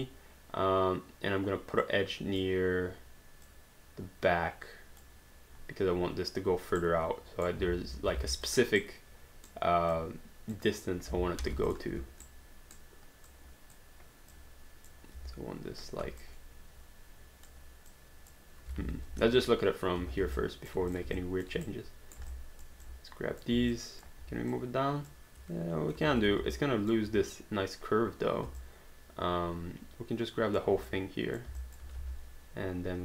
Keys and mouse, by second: 1.8 click, 3.5 click, 6.8 right click, 8.2 alt+d, 8.5 click, 8.8 right click, 9.9 click, 11.4 alt+d, 11.7 click, 12.0 q, 12.3 right click, 15.2 w, 16.2 shift+click, 17.9 shift+click, 18.8 alt+d, 19.3 space, 20.4 alt+click, 20.9 click, 21.2 alt+click, 21.6 right click, 22.3 alt+click, 22.8 click, 23.7 alt+click, 24.5 click, 26.1 ctrl+z, 26.6 alt+click, 28.6 alt+click, 30.9 click, 31.7 alt+click, 32.0 space.